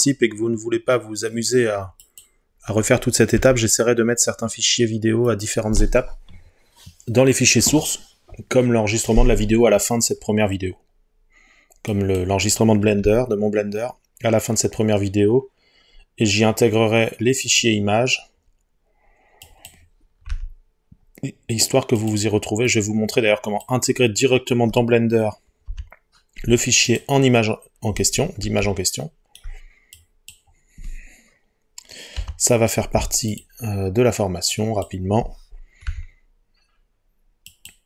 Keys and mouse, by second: 2.1 click, 3.4 g, 5.3 click, 13.1 g, 20.3 g, 22.0 click, 25.7 Delete, 30.0 click, 32.2 Delete, 35.9 g, 37.5-37.8 drag.